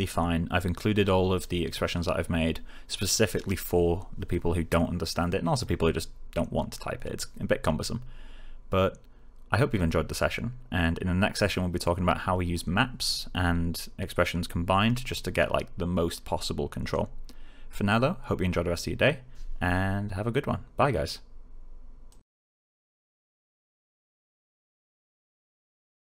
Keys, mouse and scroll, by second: 22.0 click.